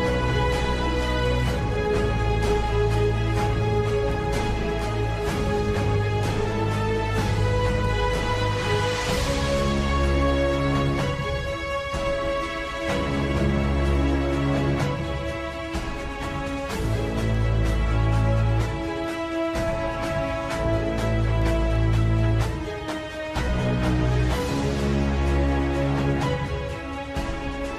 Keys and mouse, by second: 0.9 click, 1.6 ctrl+KP_Add, 2.1-3.7 ctrl+KP_Add, 4.4-5.6 middle drag, 6.5 KP_7, 7.8 shift+d, 9.6 z, 11.1 z, 12.1 KP_3, 14.2 g, 23.0 KP_7, 25.2 g.